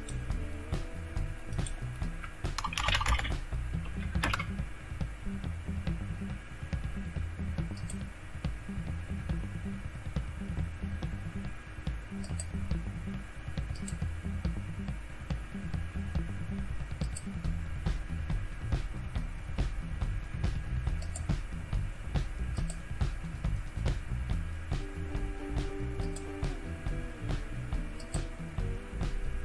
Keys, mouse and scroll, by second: 0.0 click, 0.2 click, 1.5 click, 2.3-3.5 typing, 4.2 Return, 7.8 click, 12.2-15.9 drag, 17.0-19.2 drag, 21.0 click, 22.6 click, 26.0 click, 26.3 click, 28.0 click.